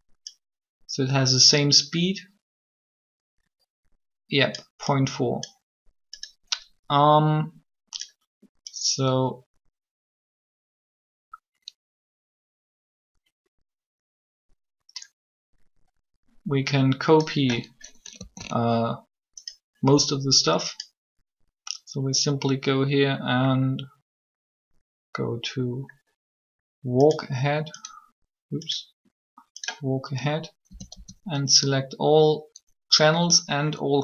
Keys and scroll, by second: 18.1 alt+a, 30.5 typing.